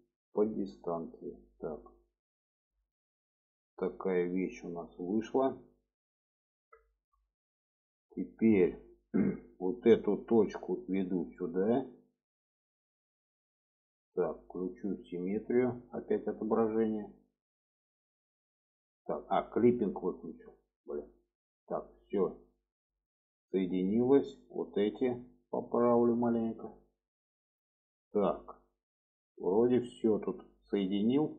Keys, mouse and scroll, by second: 1.1 click, 2.4 alt+z, 3.0-5.3 middle drag, 5.7 middle click, 6.8 shift+middle click, 7.5 shift+middle click, 8.4 shift+middle click, 9.7 click, 10.6-12.7 drag, 13.2 click, 16.3 click, 17.4-19.0 drag, 19.9 click, 21.0 click, 22.1 click, 22.4 shift+middle click, 23.0-24.0 middle drag, 24.6 click, 25.4-26.6 drag, 26.8 click, 27.5 shift+middle click, 28.0-30.6 middle drag, 30.8 shift+middle click.